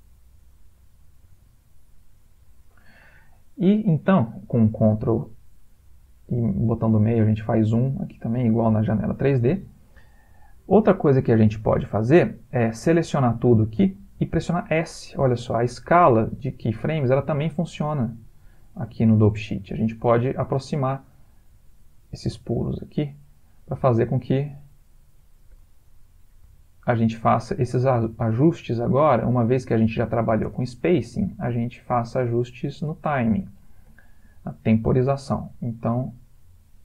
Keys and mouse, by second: 2.5 Escape, 3.7 middle click, 4.9 ctrl+middle click, 7.7 middle click, 8.2 middle click, 8.5 ctrl+middle click, 10.5 click, 13.4 a, 16.1 s, 23.7 space, 25.5 Escape, 26.5 s, 27.9 space, 30.1 Escape, 30.5 space, 32.0 Escape, 33.0 middle click, 33.5 ctrl+middle click, 33.9 middle click, 34.2 middle click, 34.6 middle click, 35.1 click, 35.6 g.